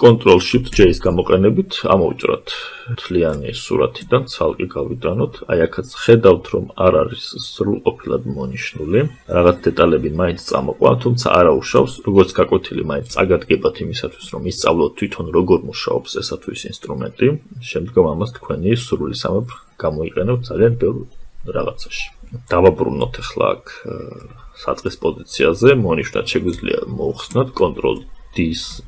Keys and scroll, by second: 26.6 ctrl+d.